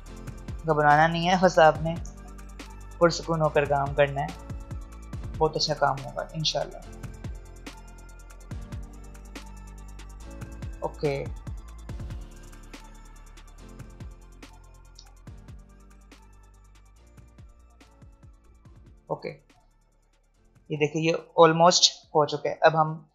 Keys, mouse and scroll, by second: 1.5 alt+scroll up 1, 3.5 click, 6.8-8.3 alt+scroll up 1, 9.1 click, 9.6 alt+scroll down 1, 10.2-11.1 alt+scroll down 1, 11.7 alt+scroll up 1, 13.6 click, 16.5 click, 17.1 alt+scroll down 1, 18.7-19.5 alt+scroll up 1, 22.3 v.